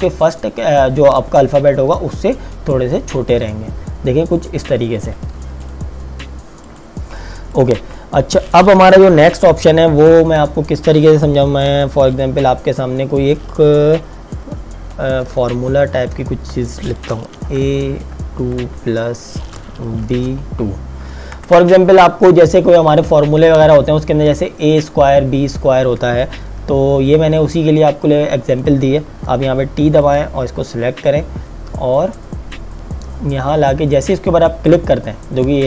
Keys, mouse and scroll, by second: 2.7 click, 10.7 click, 15.2 t, 15.8 click, 17.4 a, 18.0 KP_2, 18.6 KP_Add, 20.1 b, 20.5 KP_2, 21.3 Return, 22.7 click, 28.6 click, 29.2 t, 30.0 click, 34.0 click.